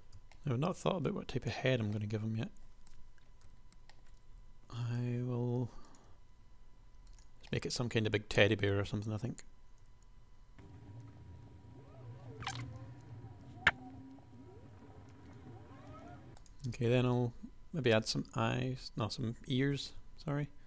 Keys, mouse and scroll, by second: 1.4 KP_1, 3.5 g, 5.3 e, 6.3 s, 7.5-8.7 middle drag, 8.9 KP_1, 10.1-13.7 typing, 13.4 super+KP_1, 15.0 g, 15.3 Tab, 15.8 KP_1, 15.9 Tab, 16.7 shift+super+space, 18.2 space, 19.9 shift+a.